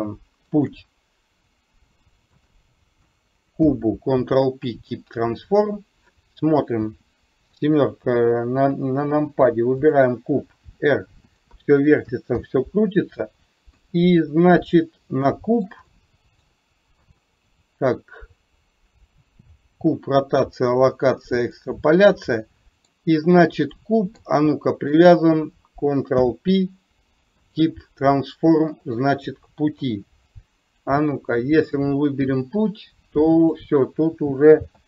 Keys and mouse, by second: 0.7 ctrl+click, 2.3 shift+click, 3.7 ctrl+p, 7.6 KP_7, 9.9 click, 12.4 ctrl+z, 13.8 KP_3, 15.3-15.8 shift+middle drag, 16.0-16.6 middle drag, 17.2 click, 21.7-23.1 middle drag, 23.9 middle click, 24.8 shift+click, 26.2 ctrl+p, 29.8 KP_3, 31.9-33.6 drag, 34.6 ctrl+z.